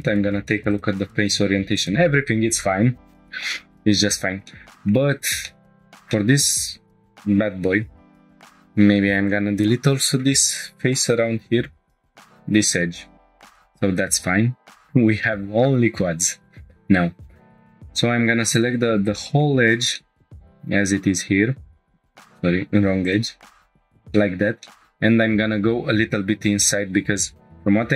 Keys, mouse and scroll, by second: 4.2 scroll down 2, 4.5-4.8 shift+middle drag, 4.9 scroll down 1, 5.5 shift+middle click, 5.6-6.1 scroll up 3, 6.1 shift+middle click, 8.2 2, 8.3 click, 12.3 Delete, 13.3 scroll down 1, 13.6 shift+middle click, 14.1-15.0 scroll down 1, 17.5 click, 19.0 click, 19.1 shift+middle click, 19.6 scroll down 1, 20.0 shift+middle click, 20.3 middle click, 21.1 ctrl+click, 22.3 ctrl+z, 23.0 ctrl+click, 23.6 middle click, 24.1 shift+middle click, 24.6 middle click, 24.8 click, 24.9 scroll down 2, 26.6-27.0 middle drag.